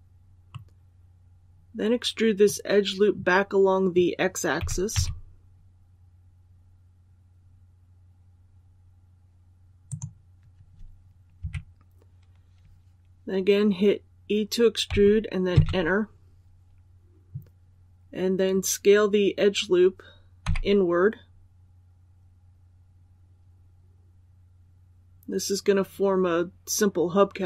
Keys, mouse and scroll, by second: 0.4-2.1 middle drag, 2.1 scroll up 1, 4.5-4.8 typing, 9.8 click, 11.3 KP_3, 14.8 e.